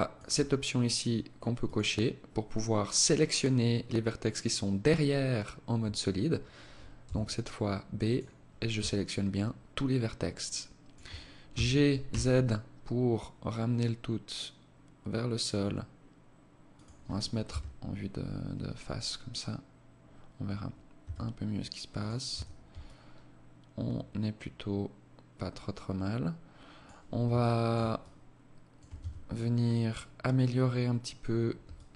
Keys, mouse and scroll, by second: 0.9 click, 6.4 b, 8.2 alt+click, 10.8 g, 16.8 KP_1, 20.3 s, 21.6 Tab, 22.1 alt+click, 26.7 alt+shift+click, 27.3 alt+click, 28.3 Tab, 29.0 scroll up 2, 29.6 scroll up 1, 31.0 alt+click.